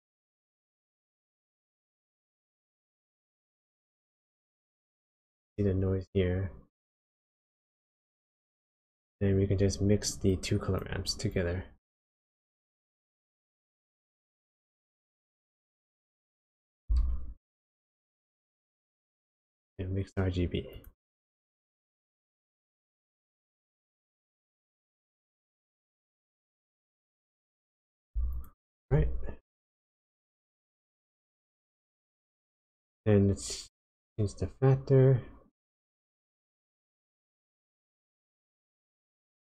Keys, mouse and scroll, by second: 1.0 click, 8.0 click, 10.3 click, 11.2 click, 13.0 click, 14.0 click, 16.4 click, 16.9 shift+a, 24.0 click, 26.5 click, 28.4 ctrl+shift+click, 33.6 click.